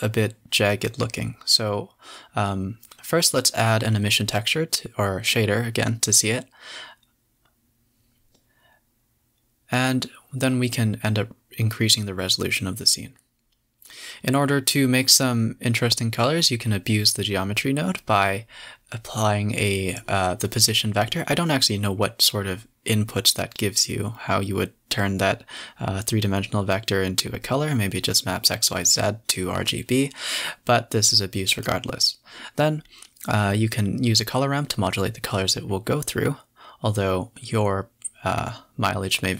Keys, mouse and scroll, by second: 0.3 z, 2.2 space, 3.0 click, 4.4 right click, 4.9 click, 5.7 space, 6.9 z, 7.1 a, 7.3 a, 10.0 space, 12.1 click, 17.0 click, 17.5-18.6 typing, 21.3 space, 21.4 shift+a, 25.4 click, 25.6 click, 26.8 click, 28.2 drag, 29.0 click, 30.1-30.6 scroll down 2, 30.3-30.6 middle drag, 30.8 space, 31.1 a, 31.2 a, 31.8 KP_0, 33.5 space, 34.2 click, 36.5 click, 37.0 space, 37.3 a, 37.4 a, 39.0-39.3 scroll up 1.